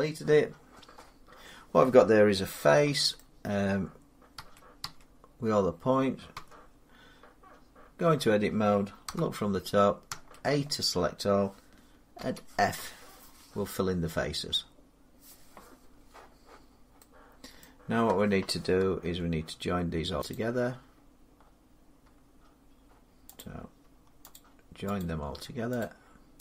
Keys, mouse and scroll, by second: 0.7-1.1 scroll up 4, 2.7 scroll, 3.0 middle click, 4.1 a, 4.6 a, 6.1 Tab, 8.8 7, 9.9 a, 12.0 f, 17.4 middle click, 18.8 Tab, 20.2 click, 23.2 click, 24.2 shift+click, 24.9 shift+click, 25.7 click.